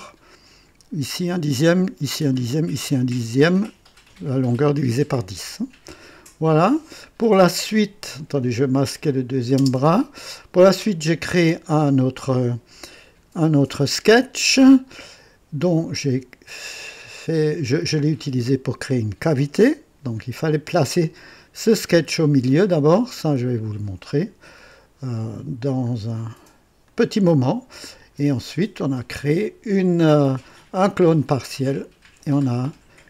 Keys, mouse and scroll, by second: 6.6 click, 8.9 click, 9.6 space, 12.9 click, 26.8-30.4 drag.